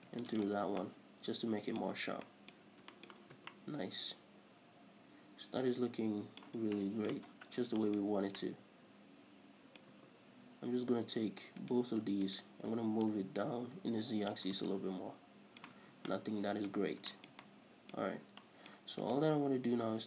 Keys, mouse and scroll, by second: 0.2 ctrl+r, 0.7 click, 0.9 scroll down 1, 1.0 Tab, 1.1-2.1 middle drag, 2.1 scroll up 1, 2.4 Tab, 2.4-6.1 middle drag, 2.9-3.6 scroll up 2, 3.6 scroll down 1, 3.7 Tab, 6.2 middle click, 6.9-11.9 middle drag, 6.9 scroll down 2, 7.6-8.1 scroll down 2, 8.3-8.8 scroll up 2, 10.4-11.0 scroll up 1, 11.0 scroll up 1, 11.1-11.9 scroll down 2, 11.9 alt+right click, 12.6 alt+shift+right click, 13.4-15.0 drag, 14.8 scroll down 2, 15.0-19.4 middle drag, 16.0 a, 16.3 scroll down 2, 17.1 scroll up 2, 18.5 scroll up 1, 19.4 right click, 19.7-20.0 scroll down 1.